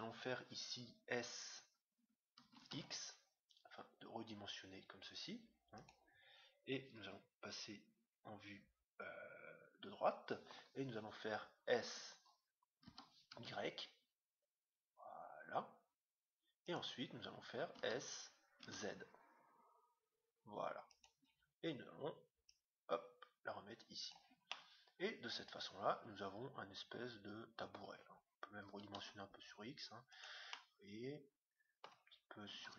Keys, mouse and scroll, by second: 2.4 s, 6.9 KP_3, 12.8 s, 17.7 s, 22.4-24.2 drag, 24.4-26.2 middle drag, 28.6 s, 30.5-32.2 middle drag, 32.5 s.